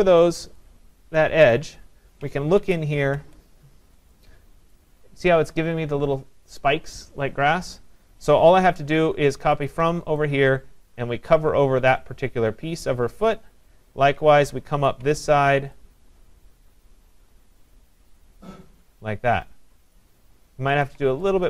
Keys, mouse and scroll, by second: 0.2 click, 1.5 click, 2.6 ctrl+=, 3.0 ctrl+=, 4.7 click, 9.7 alt+click, 13.3 click, 14.9 alt+click, 20.0 click, 20.9 click.